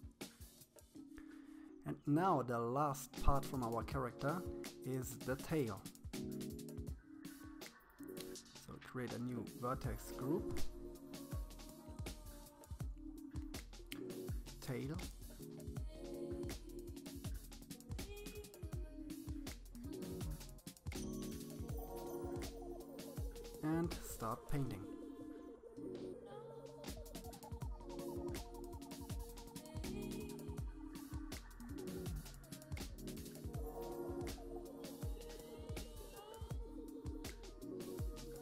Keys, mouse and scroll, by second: 0.7-3.6 drag, 6.1 click, 7.2-8.9 drag, 10.3-11.6 drag, 11.6 BackSpace, 11.7 BackSpace, 11.9 BackSpace, 12.1 BackSpace, 15.5 shift+middle click, 16.3-16.9 scroll up 6, 16.9-17.9 shift+middle drag, 17.9-18.9 scroll down 1, 19.7-21.3 drag, 22.8-24.0 drag, 25.4 click, 25.9-28.8 middle drag, 28.8-30.0 drag, 30.0-33.4 middle drag, 33.5-35.1 middle drag, 35.3-36.9 middle drag, 37.9-38.4 drag.